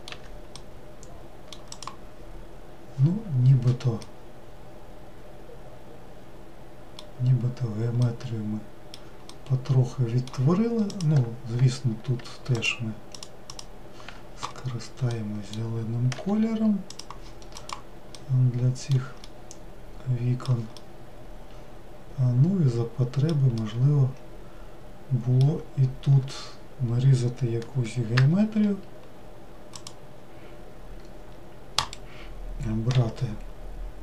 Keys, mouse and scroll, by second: 0.0 middle click, 0.2 w, 0.7-1.9 middle drag, 1.9 click, 4.3-7.2 middle drag, 8.2-11.1 middle drag, 11.1 click, 13.3 alt+click, 16.4 g, 17.8 click, 18.4-28.4 middle drag, 28.4 ctrl+r, 33.1 3.